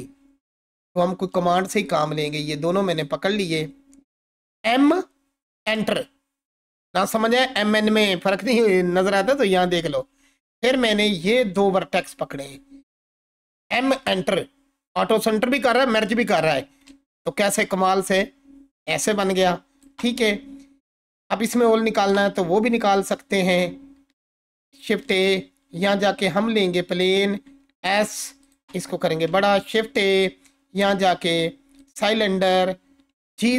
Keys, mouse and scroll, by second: 0.5-1.4 alt+drag, 4.7 m, 5.6 Return, 11.3-12.5 drag, 13.6 m, 14.0 Return, 16.9-20.0 alt+drag, 22.8 click, 23.9-24.4 scroll down 1, 24.8 shift+a, 26.5 click, 27.1 s, 28.4 click, 29.5 shift+a, 31.8 click, 32.9-33.5 typing.